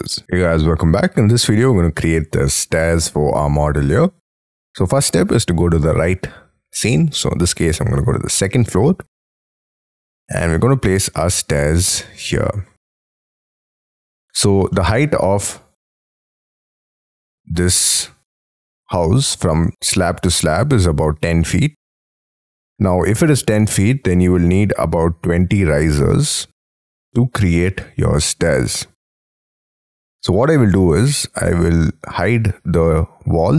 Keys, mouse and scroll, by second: 1.3 middle click, 10.4 middle click, 11.6 middle click, 13.2 scroll up 4, 13.4 middle click, 14.0 middle click, 14.8 middle click, 15.3-15.8 scroll down 11, 16.1 middle click, 21.4-21.9 scroll up 9, 22.7-23.2 scroll down 4, 23.8 middle click, 32.8 scroll down 3, 33.4 scroll down 5.